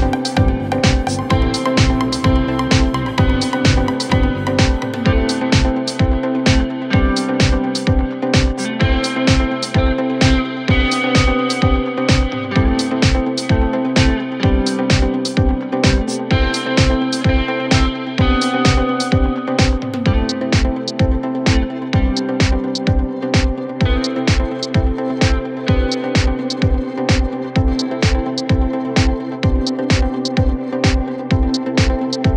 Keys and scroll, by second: 1.2 ], 9.4 ctrl+z, 17.8 Delete, 22.4 Delete, 24.3 4, 27.6 3, 30.8 ], 31.5 ].